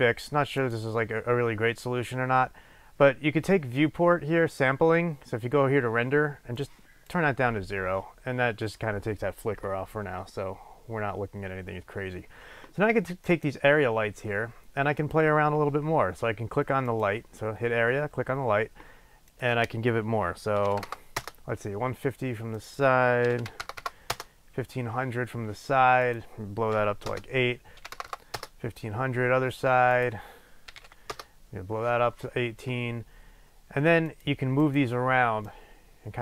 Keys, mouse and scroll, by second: 0.6 click, 6.6-13.5 drag, 15.0 click, 16.9 click, 19.2-34.2 drag, 21.2 Return, 23.9 KP_0, 24.2 Return, 27.2 Return, 28.1 KP_0, 28.5 Return, 31.2 Return, 34.6 click, 35.4-36.2 drag.